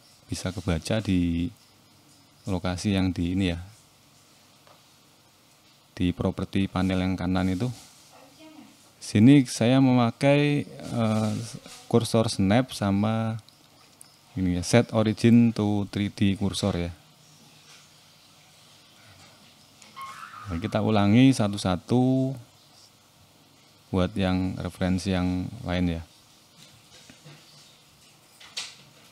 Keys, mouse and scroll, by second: 0.1-0.7 scroll down 5, 0.9 shift+middle click, 2.0 click, 2.4 shift+middle click, 3.0-3.4 scroll up 2, 3.4 Tab, 4.1 click, 5.2 click, 6.6 shift+s, 9.1 Tab, 9.6 right click, 11.3-11.8 scroll down 5, 11.9 shift+middle click, 12.7 click, 13.0-13.5 scroll up 4, 13.5 shift+middle click, 13.9-14.9 scroll up 3, 15.1-15.5 scroll up 2, 15.5 Tab, 16.1 click, 17.1 shift+s, 18.4 Tab, 18.8 right click, 20.2-21.2 scroll down 11, 21.2 shift+middle click, 21.9 click, 22.4-23.2 scroll up 4, 23.2 Tab, 24.8 click, 24.8 scroll up 1, 25.9 shift+s, 27.5 Tab, 27.8-28.2 scroll down 1, 28.2 right click.